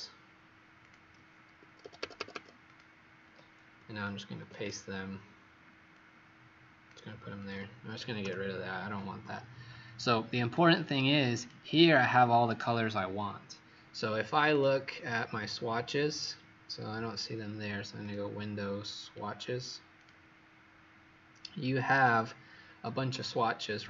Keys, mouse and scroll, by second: 0.7 click, 1.5 Escape, 1.8 Escape, 2.1 Escape, 2.3 Escape, 2.6 click, 4.4 ctrl+v, 5.8 click, 7.6 click, 8.2 Delete, 10.5 click.